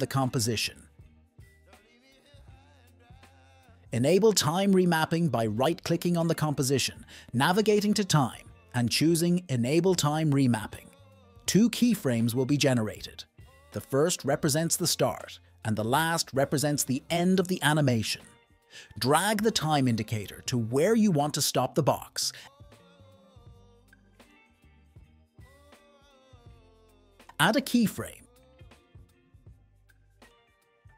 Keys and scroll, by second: 1.6-3.3 typing.